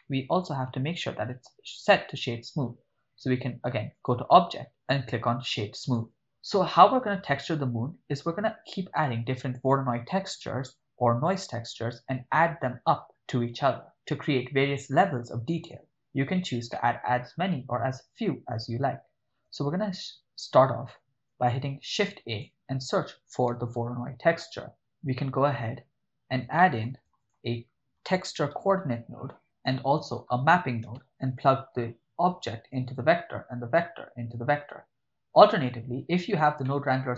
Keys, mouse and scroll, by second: 0.0-0.4 shift+middle drag, 4.0 click, 6.1 ctrl+middle click, 16.7 middle click, 21.8 shift+a, 26.6 middle click, 26.9 shift+a, 29.4 o, 29.8 shift+a, 31.0 p, 32.3 click, 34.4-35.5 drag, 36.0 click, 36.6-37.1 middle drag.